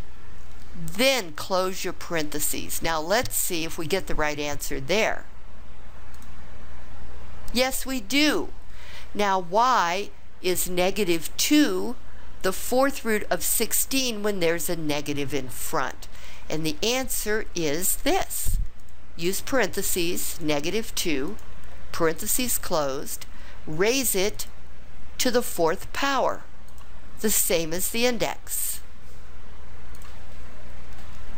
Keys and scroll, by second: 1.6 ), 6.1 Return, 18.8 (, 21.2 2, 22.1 ), 24.3 ^, 26.7 4, 29.9 Return.